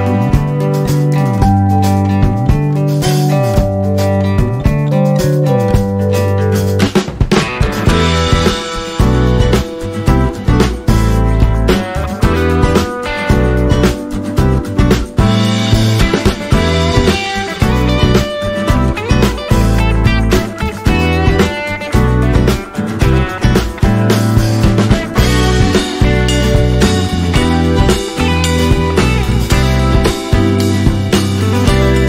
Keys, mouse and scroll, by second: 2.7-11.3 drag, 13.3 right click, 15.1 click, 23.3 click.